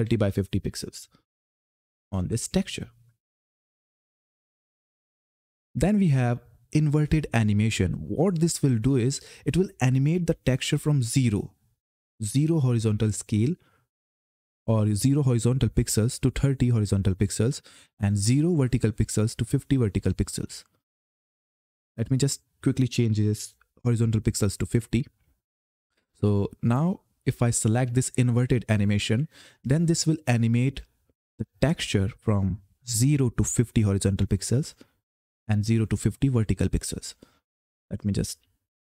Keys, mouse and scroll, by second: 0.0-2.5 typing, 4.7 click, 21.6 click, 26.0 click, 26.8-28.5 scroll down 1, 28.5 click, 37.6 click.